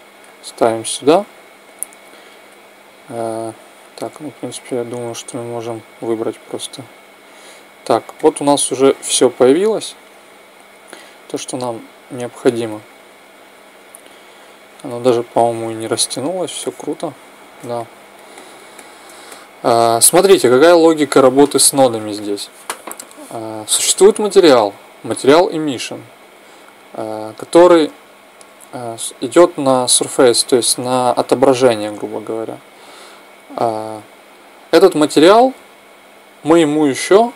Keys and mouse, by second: 2.2 click, 3.6 click, 7.9-9.9 middle drag, 12.8-14.5 middle drag, 15.7 middle click, 20.9-26.0 drag, 30.3-32.0 drag, 34.1-36.1 drag.